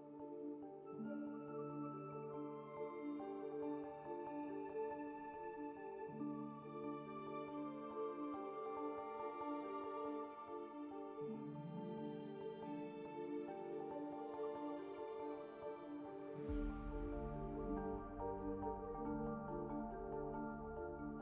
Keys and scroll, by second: 4.8 alt+c, 7.0 1, 7.9 alt+q, 8.6 1, 10.1 alt+q, 10.1 alt+c, 12.9 x, 14.6 ctrl+w, 14.7 1, 15.9 alt+q.